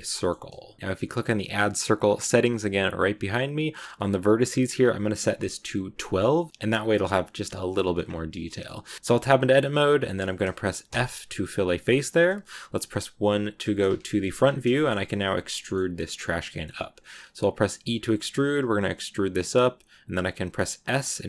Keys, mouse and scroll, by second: 0.0-2.2 shift+middle drag, 2.2-5.9 drag, 6.2 middle click, 6.6 scroll up 2, 7.9-8.4 scroll down 1, 8.4 middle click, 8.7 Tab, 13.4 KP_1, 14.2 scroll up 1, 14.2 scroll down 2, 14.6-15.8 shift+middle drag, 15.8-17.5 scroll down 1, 17.5 e.